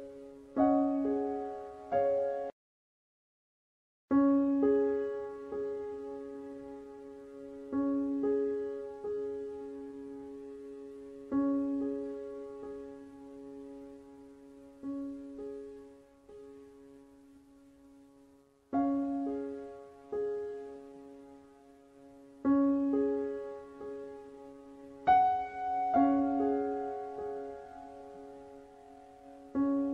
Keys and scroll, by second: 3.7-5.8 typing, 13.0 Delete, 18.9 ctrl+c, 20.2 ctrl+v.